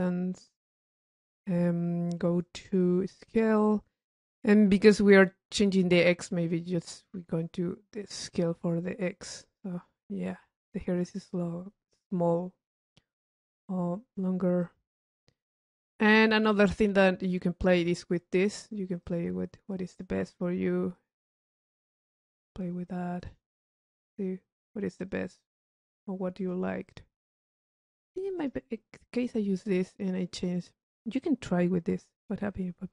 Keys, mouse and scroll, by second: 2.8 click, 6.6 click, 8.8 click, 10.1 click, 11.7 click, 13.1 click, 13.7 middle click, 14.6 click, 15.7 click, 17.4 click, 18.1 click, 19.2 click, 21.1 click, 22.1 click, 22.7 click, 23.4 click, 25.2 click, 25.7 click, 26.6 click, 27.9 click, 30.1 click, 32.4 click.